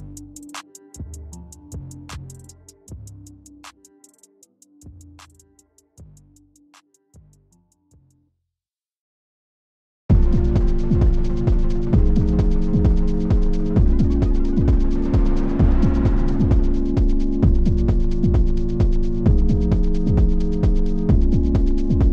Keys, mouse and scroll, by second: 4.9 click, 5.1 z, 5.8-17.5 drag, 18.0-22.1 drag.